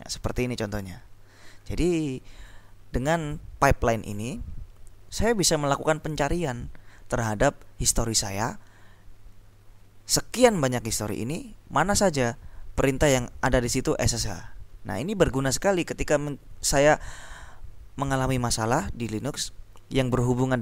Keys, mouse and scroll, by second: 2.0-2.7 scroll down 2.